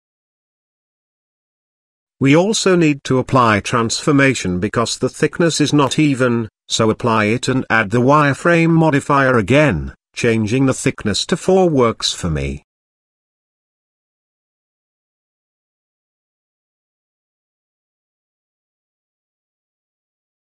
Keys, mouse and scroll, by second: 0.8-1.2 shift+middle drag, 1.5 middle click, 2.1-2.6 shift+middle drag, 4.0 middle click, 4.6-4.9 shift+middle drag, 6.5 click, 7.6 ctrl+a, 9.6-11.5 drag, 12.3 middle click, 13.5-14.6 drag, 14.8 click, 16.3-17.9 middle drag.